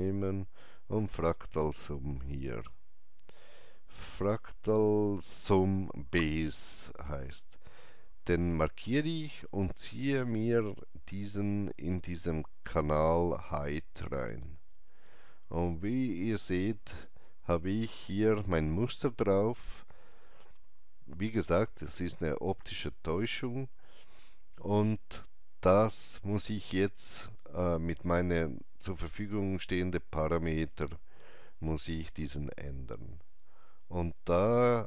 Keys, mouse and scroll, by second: 8.0-16.9 drag, 8.0-8.3 scroll up 1.